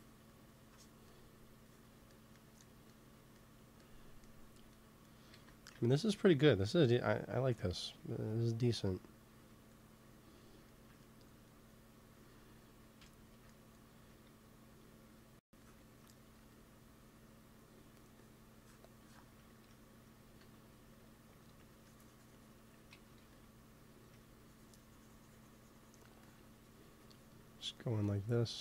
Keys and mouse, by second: 5.2-7.1 drag, 5.6 ctrl+s, 7.3 KP_3, 9.6-11.6 middle drag, 15.5-17.4 drag, 16.3 f, 19.2-21.2 drag, 20.3 ctrl+z, 21.6-22.9 drag, 22.9 ctrl+z, 23.1 f, 23.8 f, 26.0-28.6 drag.